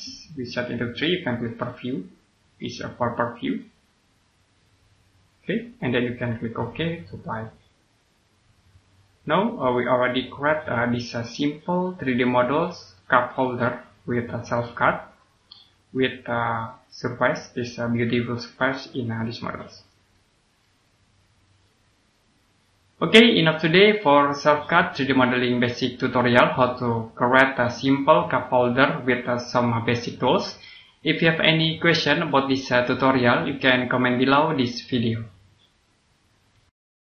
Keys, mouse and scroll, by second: 9.9 scroll down 1, 10.3 click, 12.8 middle click, 13.4 scroll up 1, 15.1 click, 20.0 middle click, 20.7 click, 21.5 middle click.